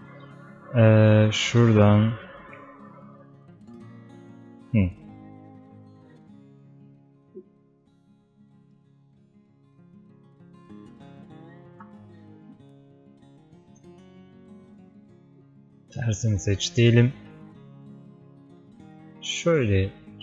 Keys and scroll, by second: 5.8 space, 11.8 ctrl+z.